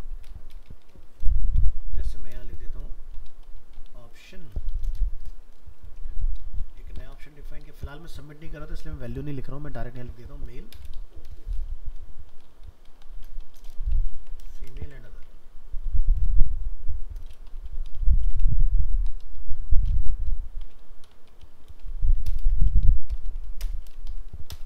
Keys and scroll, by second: 14.2 ctrl+c, 14.6 ctrl+v, 14.8 ctrl+Return.